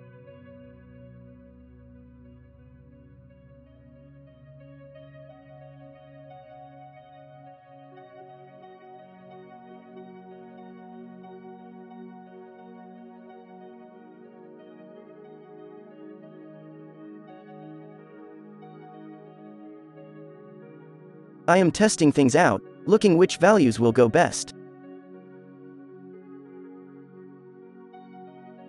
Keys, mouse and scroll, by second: 2.8-6.2 drag, 7.0 middle click, 7.4-9.9 drag, 10.9 z, 11.8 alt+a, 14.2 click, 14.4 click, 15.2 click, 15.7 click, 16.0 click, 16.4 click, 17.4 click, 18.0 click, 18.5-19.2 right drag, 19.9-23.7 drag, 24.4 click, 25.4 middle click, 25.7 click, 26.2 click, 26.3 click, 26.7 click, 27.4 n, 28.0 alt+a, 28.3 click.